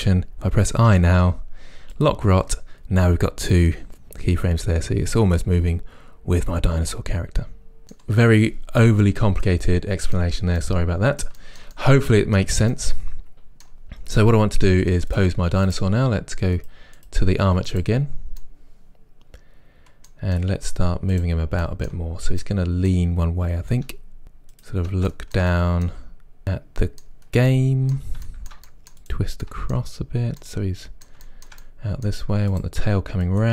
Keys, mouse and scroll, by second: 3.6-9.2 right drag, 7.8 middle click, 9.5-15.1 middle drag, 15.1 click, 15.7-16.7 right drag, 17.0 click, 18.4-21.1 middle drag, 21.1 drag, 21.6-24.4 shift+middle drag, 22.2-22.5 scroll down 2, 23.8 r, 24.5 middle click, 24.8 click, 25.0 r, 25.3 middle click, 25.8 click, 25.9 r, 26.2 click, 26.3-29.0 shift+middle drag, 29.2 middle click, 29.5-30.4 drag, 30.4 r, 31.3 click, 31.5-32.7 middle drag, 31.7 scroll down 2, 32.7 click.